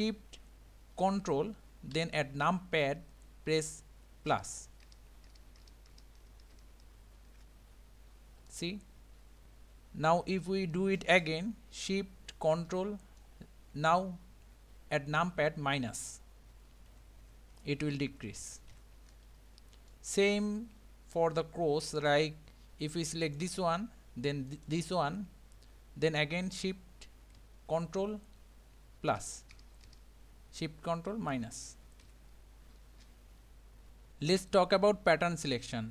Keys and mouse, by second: 4.3 ctrl+shift+KP_Add, 4.8 ctrl+shift+KP_Add, 5.3 ctrl+shift+KP_Add, 5.6 ctrl+shift+KP_Add, 5.9 ctrl+shift+KP_Add, 6.2 ctrl+shift+KP_Add, 6.6 ctrl+shift+KP_Add, 6.9 ctrl+shift+KP_Add, 8.5-13.2 middle drag, 16.5 ctrl+shift+KP_Subtract, 16.9 ctrl+shift+KP_Subtract, 17.2 ctrl+shift+KP_Subtract, 17.5 ctrl+shift+KP_Subtract, 17.8 ctrl+shift+KP_Subtract, 18.1 ctrl+shift+KP_Subtract, 18.4 ctrl+shift+KP_Subtract, 18.7 ctrl+shift+KP_Subtract, 19.9-21.1 middle drag, 23.3 click, 24.5 shift+click, 29.2 ctrl+shift+KP_Add, 29.5 ctrl+shift+KP_Add, 30.5 ctrl+shift+KP_Add, 31.3 ctrl+shift+KP_Subtract, 31.6 ctrl+shift+KP_Subtract, 32.0 ctrl+shift+KP_Subtract.